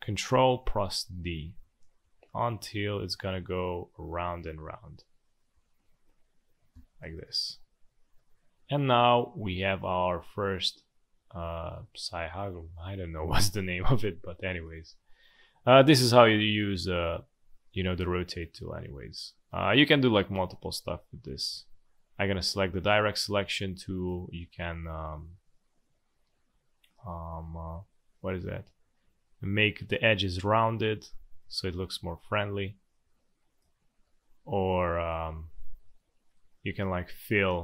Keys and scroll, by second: 0.6 ctrl+d, 1.0 ctrl+d, 1.3 ctrl+d, 1.4 ctrl+d, 1.6 ctrl+d, 1.8 ctrl+d, 1.9 ctrl+d, 2.1 ctrl+d, 2.3 ctrl+d, 2.4 ctrl+d, 3.0 ctrl+d, 3.8 ctrl+d, 4.3 ctrl+d, 5.5 ctrl+z, 6.7 v, 13.8 space, 17.8 space, 21.5 a, 30.9 space, 31.7 v, 33.2 space, 34.0 space.